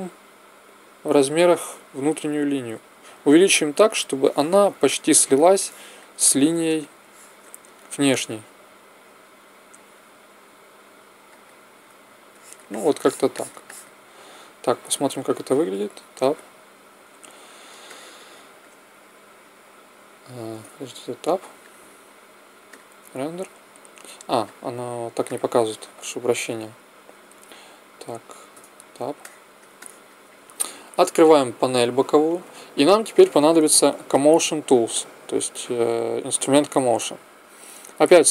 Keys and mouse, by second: 4.8 middle click, 5.3-8.6 middle drag, 8.6 click, 8.6 s, 9.0-10.4 middle drag, 11.4 click, 12.2 click, 13.2-15.1 middle drag, 15.6 Tab, 17.8-20.1 middle drag, 20.7 Tab, 21.8-23.5 drag, 24.5-25.7 drag, 26.2 click, 27.9 click, 28.5 Tab, 31.4 t, 34.9-36.7 drag, 36.7-37.9 middle drag.